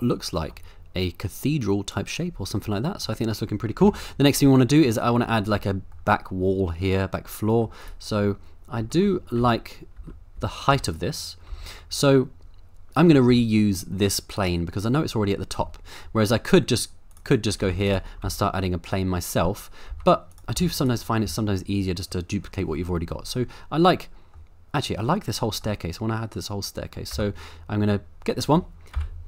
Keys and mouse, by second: 1.3 click, 2.6 middle click, 3.8 KP_0, 4.9-5.2 middle drag, 5.4 shift+middle drag, 6.0 middle click, 7.6 middle click, 7.8 click, 8.3-8.8 middle drag, 9.0 shift+middle click, 9.4 Tab, 10.0 Tab, 10.4 Tab, 10.7 3, 11.5 Tab, 11.9-13.1 middle drag, 13.3 Tab, 15.6 Tab, 16.0 middle drag, 17.6 shift+s, 18.2 shift+a, 19.9 Tab, 20.5 Tab, 23.0-24.3 middle drag, 25.5 middle click, 27.1 Tab, 28.9 KP_7.